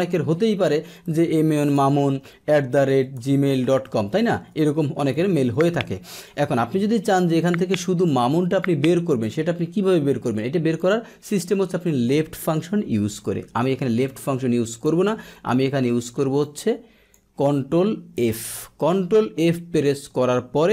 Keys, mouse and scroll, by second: 4.9 BackSpace, 6.0 Return, 7.6 click, 10.7 click, 14.0 click, 14.9 Delete, 14.9 click, 16.4-17.0 drag, 18.1 ctrl+f, 19.4-19.8 drag.